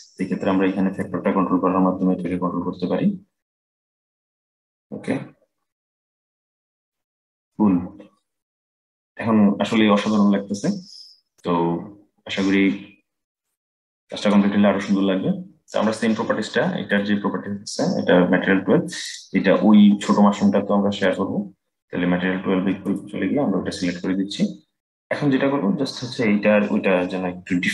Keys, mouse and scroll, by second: 0.7-3.8 drag, 7.8-11.3 scroll down 4, 11.3-12.8 scroll up 3, 12.8-13.9 scroll up 1, 13.9 click, 16.6 click, 18.8 click, 20.8 click, 26.6-27.7 middle drag.